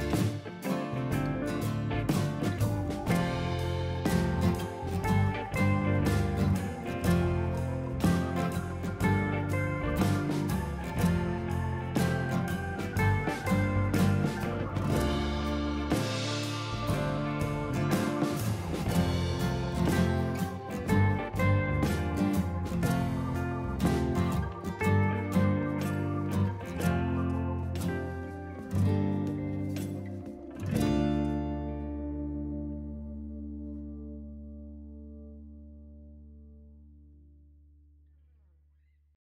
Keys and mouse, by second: 0.2 click, 1.3 x, 1.4 click, 2.6 click, 3.0 right click, 3.4 click, 4.6 right click, 5.2 click, 7.0 ctrl+click, 7.8 click, 13.5 ctrl+e, 13.7 ctrl+1, 13.7 click, 14.4 click, 14.6 x, 14.7 click, 15.1 ctrl+1, 15.3 ctrl+e, 15.4 click, 16.1 1, 16.6 Escape, 16.8 click, 17.0 ctrl+shift+x, 17.1 Escape, 17.3 ctrl+1, 17.3 ctrl+click, 17.5 ctrl+shift+x, 17.6 click, 17.9 ctrl+1, 18.4 click, 18.5 ctrl+shift+x, 18.6 click, 19.1 ctrl+e, 19.2 click, 20.0 ctrl+1, 20.0 click, 20.2 ctrl+shift+x, 20.3 click, 20.9 ctrl+1, 21.2 click, 21.4 click, 22.4 Escape, 22.6 click, 22.7 Escape, 22.9 click, 24.4 ctrl+1, 24.5 click, 24.6 ctrl+shift+x, 25.1 Escape, 25.2 click, 29.0 ctrl+e, 29.0 click, 32.2 ctrl+shift+x, 32.5 click, 33.4 click, 34.9 ctrl+1, 35.0 Escape, 35.1 click, 36.3 ctrl+1, 36.3 click, 36.6 Delete.